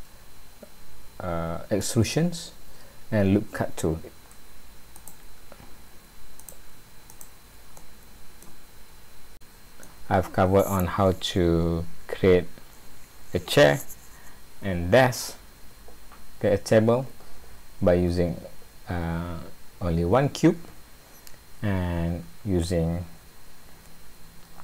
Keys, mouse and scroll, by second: 5.0 click, 6.4 click, 7.2 click, 7.8 middle click, 9.4 middle click.